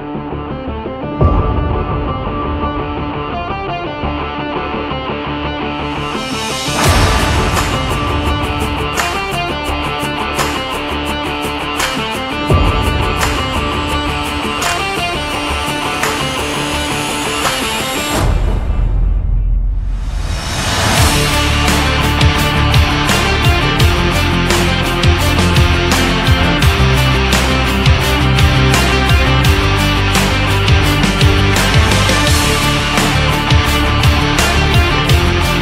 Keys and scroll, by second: 3.5 ctrl+Up, 8.7 Down, 21.3 ctrl+z, 27.4 Down, 28.0 Up.